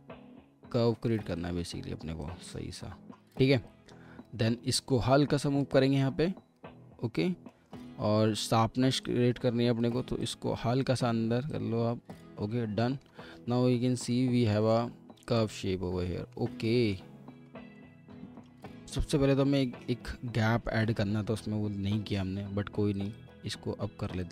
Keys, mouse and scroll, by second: 7.5 middle click, 14.0 alt+w, 14.5 alt+w, 15.0 scroll down 1, 15.4 alt+middle click, 16.6 alt+middle click, 17.3-17.7 scroll up 1, 17.8 alt+middle click, 20.4 alt+middle click, 21.9 typing, 23.1 double click.